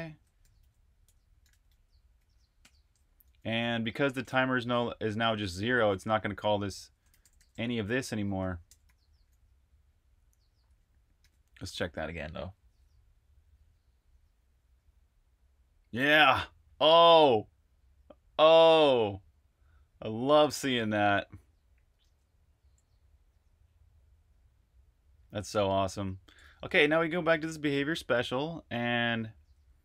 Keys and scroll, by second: 0.1-2.5 typing, 4.2 typing, 6.0 Escape, 6.7-9.3 typing, 11.1 super+r, 11.5-12.3 typing, 21.9 super+q, 26.3 super+Tab.